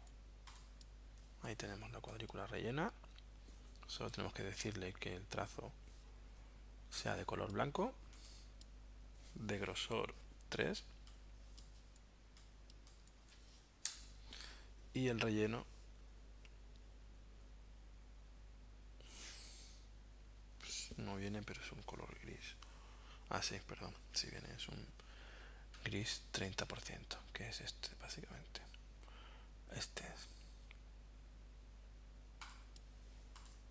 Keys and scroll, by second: 1.5 v, 13.3 3, 13.9 Return.